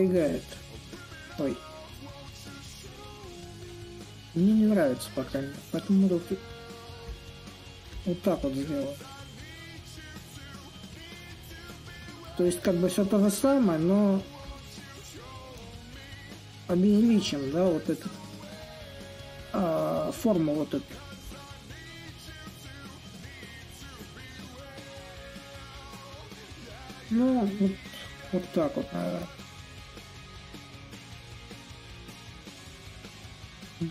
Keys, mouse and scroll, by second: 0.0-1.2 drag, 1.2 ctrl+z, 2.7-10.0 drag, 10.7-15.7 drag, 15.9-20.9 drag, 21.8-26.8 drag, 28.9-33.9 drag.